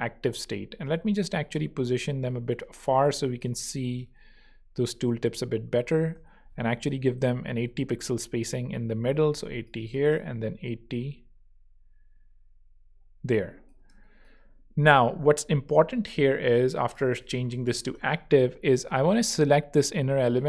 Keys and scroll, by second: 6.6 alt+shift+Right, 7.9 alt+Right, 8.8 alt+Left, 9.3 alt+space, 9.9 space, 13.8 shift+space, 14.7 space, 16.8-18.2 typing, 18.8 Return.